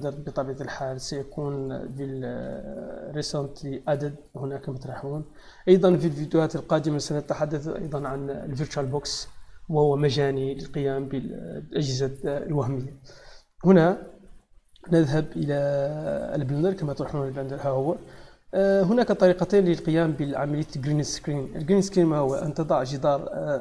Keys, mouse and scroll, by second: 1.5 click, 13.7 click, 17.0-17.4 middle drag, 20.4 click, 21.5-22.5 drag.